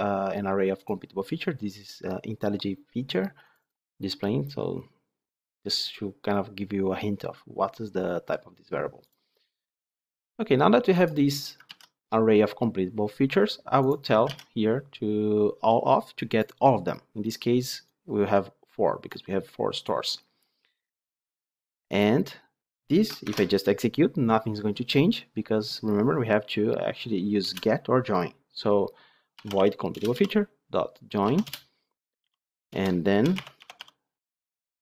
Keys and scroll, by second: 11.6 ctrl+c, 14.2 ctrl+v, 23.2 ctrl+shift+F10, 29.8 Return.